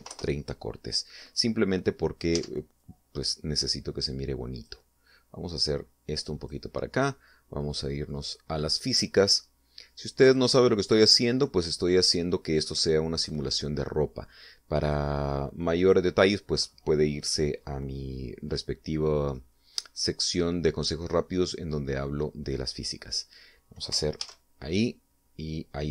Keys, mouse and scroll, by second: 0.4-1.4 typing, 3.2 Tab, 3.7-5.8 drag, 6.6-7.5 drag, 8.7 middle click, 9.6 click, 11.1 click, 12.4-13.7 middle drag, 14.1 right click, 15.8 click, 16.7 right click, 18.7 scroll down 1, 20.3-22.2 middle drag, 24.0 scroll up 1, 25.1 alt+a.